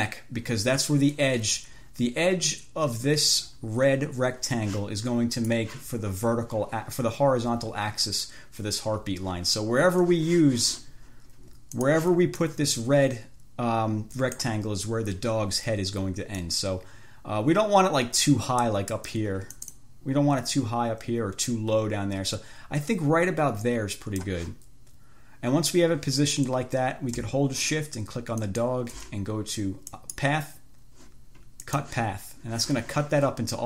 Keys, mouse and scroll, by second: 5.6 click, 12.1 click, 12.7-14.9 drag, 16.7-19.6 drag, 19.0 right click, 19.8-24.7 drag, 28.7 shift+click, 30.2 click, 31.9 click.